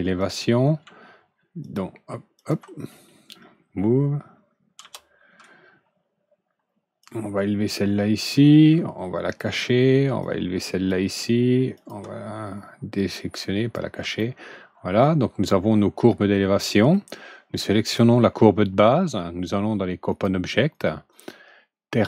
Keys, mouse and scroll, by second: 0.1 click, 1.5 ctrl+click, 2.3 ctrl+click, 4.7 w, 6.9 click, 9.2 alt+click, 10.1 alt+click, 11.7 alt+click, 12.9 alt+click, 14.1-16.2 alt+middle drag, 16.6 alt+middle drag, 17.7 click, 20.0 click, 20.6 click, 21.0 click.